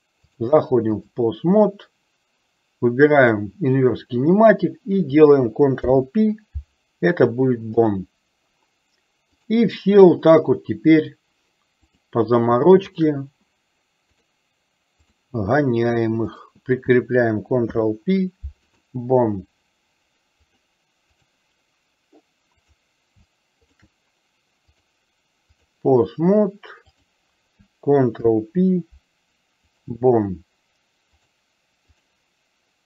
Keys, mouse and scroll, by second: 0.4 click, 3.3 click, 6.0 ctrl+p, 9.6 click, 13.0 shift+click, 14.2-15.3 drag, 17.7 ctrl+p, 20.6 click, 24.9-26.0 drag, 27.1 click, 28.2 ctrl+p, 31.4 click.